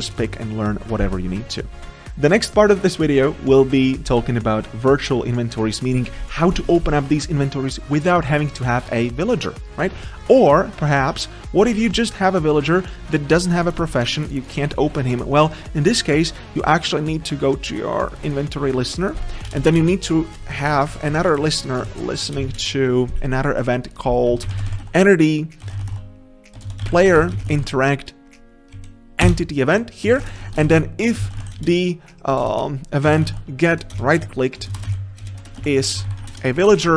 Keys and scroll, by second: 0.1 ctrl+BackSpace, 21.6 ctrl+shift+Left, 21.9 ctrl+c, 26.7 ctrl+BackSpace, 29.3 Return, 32.4 ctrl+BackSpace.